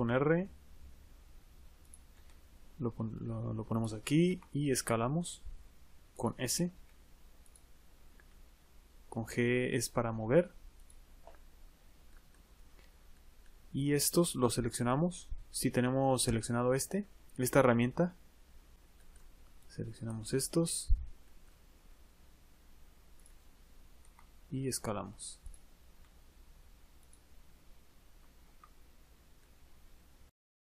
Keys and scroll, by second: 21.5 g, 24.6 s.